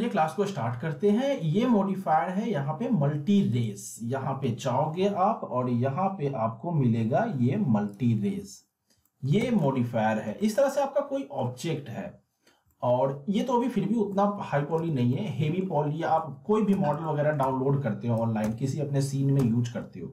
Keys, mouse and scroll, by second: 3.5 click, 4.4 m, 4.9 m, 5.6 m, 7.9 click, 9.0 alt+middle click, 9.4-11.6 z, 12.7-13.6 alt+middle drag, 14.8 z, 15.1-15.7 alt+middle drag, 16.7 scroll up 1, 16.8-19.4 typing, 17.0 alt+middle click.